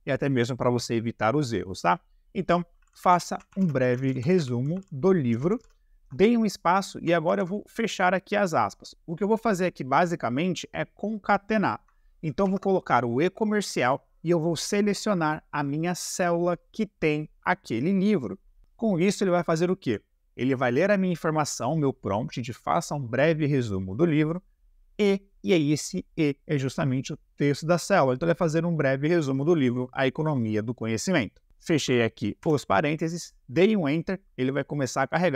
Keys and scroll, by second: 2.7-5.5 typing, 6.7 space, 7.3 shift+`, 12.4 shift+7, 31.7 shift+0, 32.4 Delete.